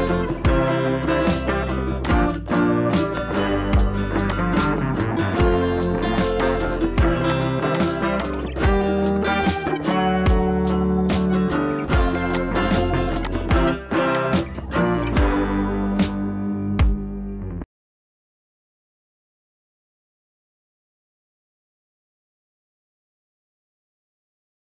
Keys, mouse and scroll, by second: 0.2-0.9 shift+click, 0.9 shift+scroll up 2, 2.0 shift+click, 2.6 ctrl+t, 3.2-4.3 scroll down 1, 4.3-5.5 drag, 6.6 scroll down 1, 7.2 click, 8.6 shift+Caps_Lock, 8.9 shift+Down, 10.5 shift+Down, 12.0 scroll up 1, 12.2-14.8 typing, 12.3-12.9 click, 12.9 scroll down 1, 13.2-13.8 click, 13.8 scroll up 1, 14.1 click, 14.6 scroll up 1, 15.2 scroll up 1, 15.4-16.5 scroll down 1, 17.3 scroll up 1, 22.5 scroll down 2, 23.2-23.9 scroll down 1, 23.9 scroll up 1.